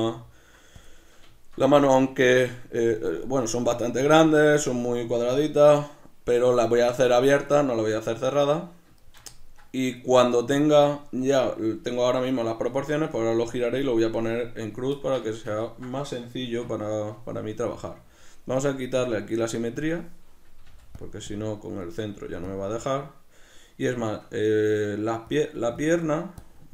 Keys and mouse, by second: 0.0 s, 0.9 click, 1.4-14.6 shift+middle drag, 14.6 right click, 15.0-19.8 ctrl+middle drag, 16.4 Tab, 16.6 b, 17.7 b, 17.8 Tab, 19.0 b, 19.8 click, 21.0 click, 24.0-25.3 shift+middle drag, 25.3 click.